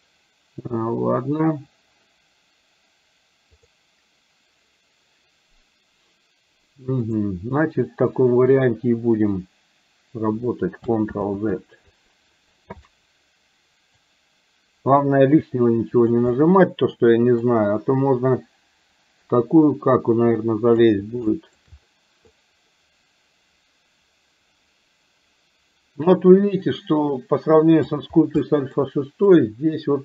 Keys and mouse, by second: 11.1 ctrl+z, 14.0-16.1 drag, 16.5 middle click, 17.4-20.8 drag, 21.4 shift+middle click, 22.4-23.8 drag, 23.9-28.0 drag, 28.5 middle click, 29.4-30.0 drag.